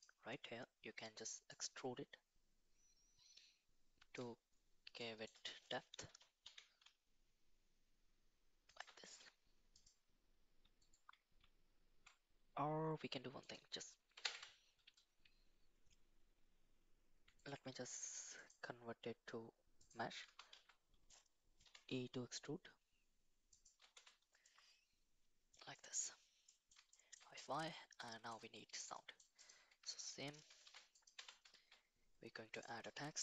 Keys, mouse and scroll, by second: 0.0 click, 1.5-4.1 shift+drag, 5.0 shift+middle click, 6.1 g, 9.0-10.9 right drag, 13.5 click, 17.4-20.2 right drag, 20.2 Tab, 20.5 a, 21.6 e, 23.9 Tab, 24.4-25.5 middle drag, 25.7 middle drag, 26.5 middle drag, 26.9 shift+middle drag, 28.0 middle click, 28.9 middle drag, 29.7 Tab, 30.6 shift+s, 31.1 Tab, 31.5 shift+a.